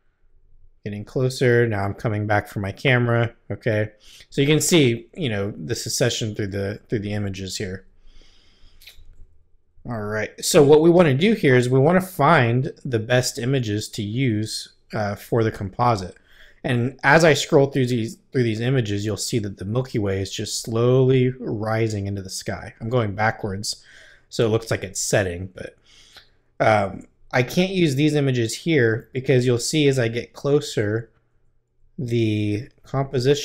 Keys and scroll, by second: 2.4 Left, 4.4 Right, 6.7 Left, 18.4 Left, 19.4 Right, 20.2 Left, 22.5 Left, 25.5 Right, 26.9 Left, 28.6 Right.